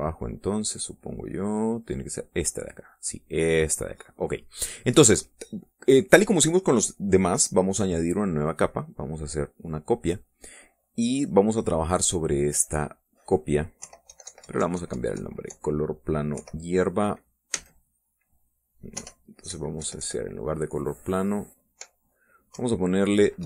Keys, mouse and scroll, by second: 2.9 click, 3.3 click, 4.2 click, 9.7 click, 13.0 click, 14.2 Home, 14.5 Delete, 16.8 End, 17.9 space, 19.3 BackSpace, 20.1 ctrl+Left, 22.9 Delete.